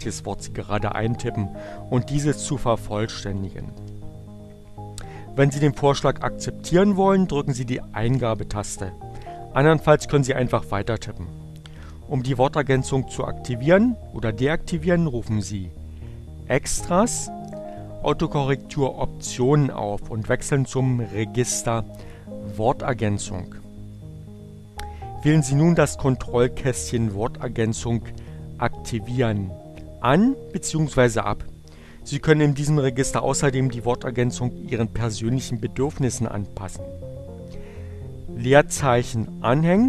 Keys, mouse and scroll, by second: 2.1-4.2 typing, 7.2 Return, 16.1 click, 20.0 click, 22.5 click.